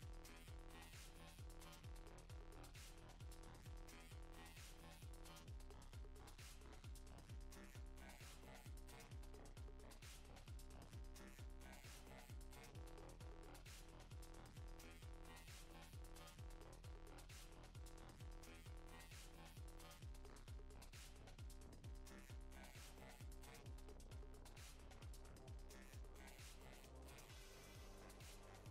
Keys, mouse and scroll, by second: 0.1 KP_7, 2.0 click, 2.2 ctrl+z, 2.7 click, 3.6 f, 4.1 click, 5.6 middle click, 6.0 middle click, 6.3 middle click, 6.9 f, 7.7 click, 8.4 click, 9.1 scroll up 1, 9.3 click, 9.7 middle click, 10.0 ctrl+z, 10.3 click, 11.0 click, 12.3 click, 14.7-15.1 scroll up 2, 14.9 middle click, 15.8 shift+middle click, 16.1 scroll up 2, 16.3 middle click, 17.1 click, 17.5 click, 18.0 middle click, 18.3 scroll down 1, 18.8 shift+click, 19.3 click, 19.7 click, 20.7 click, 21.1 click, 21.6 click, 21.7 click, 21.8 click, 21.9 click, 22.0 middle click, 22.3 click, 22.5 click, 22.6 click, 22.9 click, 23.0 click, 23.1 click, 23.2 middle click, 23.4 click, 23.6 click, 23.7 click, 23.8 click, 23.9 click, 24.1 click, 24.2 click, 24.4 middle click, 24.5 click, 24.6 click, 24.7 click, 24.9 click, 25.2 middle click, 25.3 click, 25.8 click, 25.9 click, 26.0 middle click, 26.2 click, 26.6 click, 26.9 middle click, 27.1 click, 27.4 click, 27.5 click, 28.2 click, 28.4 middle click, 28.6 shift+middle click.